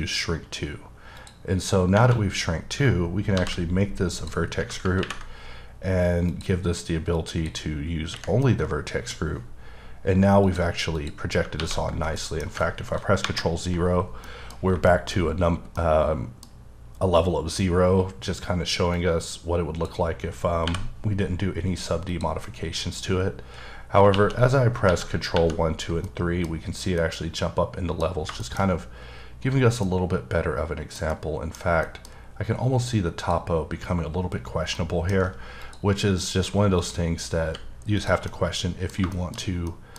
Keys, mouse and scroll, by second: 0.0 click, 1.2 click, 2.4-3.4 scroll down 2, 3.4 ctrl+g, 4.2 click, 6.3 click, 7.2 click, 8.4 middle click, 9.2 scroll up 3, 10.5 click, 11.0 click, 11.6 ctrl+1, 12.2 middle click, 13.3 0, 14.3 middle click, 14.6 scroll up 1, 14.9 shift+middle click, 15.2-15.8 scroll up 1, 15.8 middle click, 17.1-18.1 scroll down 3, 19.0 click, 20.7 n, 22.1 click, 22.6-23.0 scroll up 1, 24.1 ctrl+2, 24.9 ctrl+3, 25.4 ctrl+4, 26.1 middle click, 27.0 middle click, 28.4 shift+middle click, 28.7-29.4 shift+scroll up 1, 29.4-29.9 scroll down 1, 29.9 middle click, 31.2 double middle click, 31.9 middle click, 33.2 click, 34.8 middle click, 35.6 click, 36.3 click, 36.8 click, 37.5 h, 38.0 click, 38.3 middle click, 38.7-39.1 scroll down 2, 39.1 shift+middle click, 39.6 scroll down 1, 39.7 middle click.